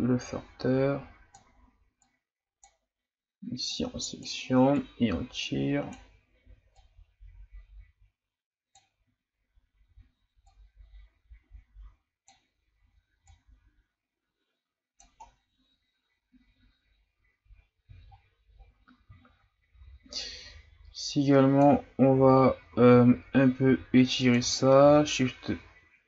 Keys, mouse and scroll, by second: 15.3-15.6 scroll down 2, 18.0-18.7 shift+scroll up 10, 19.2-20.2 shift+scroll up 3, 20.2-22.8 drag, 22.8 ctrl+z, 23.6 f, 24.8 shift+f.